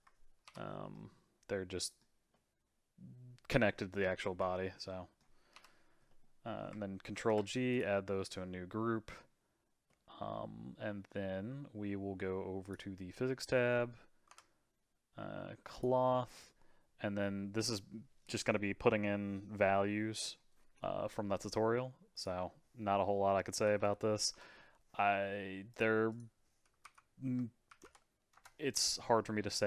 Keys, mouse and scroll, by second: 0.4 KP_Divide, 0.9-5.5 middle drag, 5.5 KP_Divide, 6.1-7.1 middle drag, 7.1 ctrl+g, 8.2-12.6 middle drag, 12.6 click, 14.3 Tab, 15.7-18.8 drag, 22.1-25.3 drag, 26.1-29.1 drag.